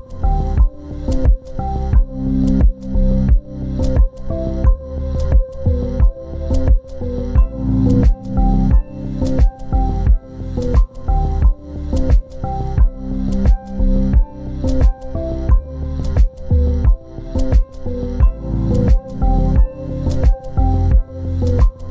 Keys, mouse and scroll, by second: 2.0-4.1 scroll up 1, 4.1 scroll down 1, 5.1 double click, 8.6-9.5 scroll down 1, 9.5 double click, 10.7 scroll up 1, 15.2 scroll down 1, 17.3-21.9 scroll up 1.